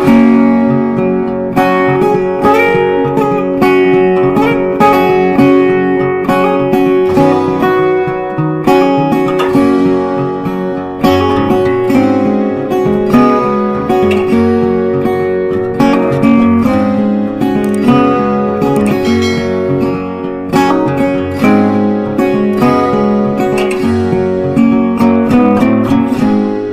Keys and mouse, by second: 1.9 Down, 8.7-13.7 drag, 13.7 right click, 15.4-18.8 drag, 18.8 right click, 20.1 click, 22.9 click, 24.9 F4.